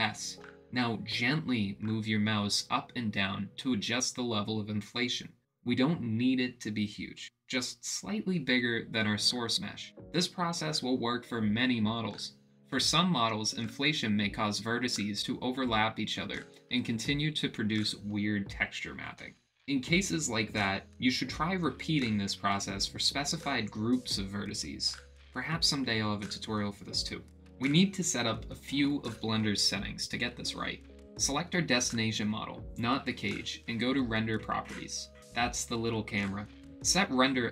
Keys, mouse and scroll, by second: 1.4 alt+s, 4.4 ctrl+z, 5.5 click, 6.3 alt+s, 9.2 click, 9.6 middle click, 10.4 Tab, 10.8-14.1 middle drag, 14.6 click, 30.8 click, 32.6 click.